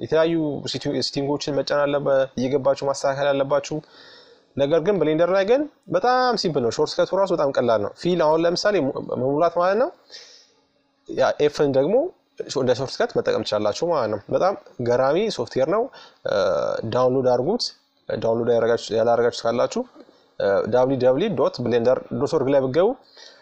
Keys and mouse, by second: 0.2 f, 2.3-5.1 right drag, 4.3 f, 7.1-10.0 right drag, 9.2 f, 11.0-14.2 right drag, 13.2 f, 14.9-16.9 middle drag, 17.0-22.0 right drag, 21.0 f, 22.1 middle click, 23.0-23.4 right drag.